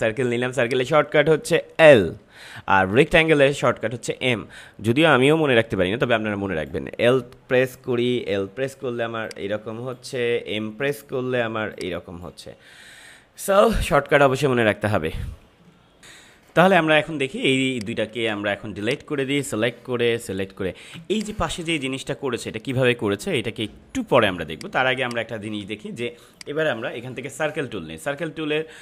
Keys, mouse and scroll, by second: 8.7 l, 9.2-11.3 drag, 11.3 m, 11.7-14.6 drag, 15.5 click, 16.0 ctrl+m, 16.9 ctrl+=, 17.6 space, 17.7 click, 18.1 space, 18.8-20.1 drag, 20.1 Delete, 20.9 space, 21.1 click, 21.4 space, 24.1 space, 24.4 click, 24.6 space, 25.0 click, 25.1 space, 26.3-28.8 drag.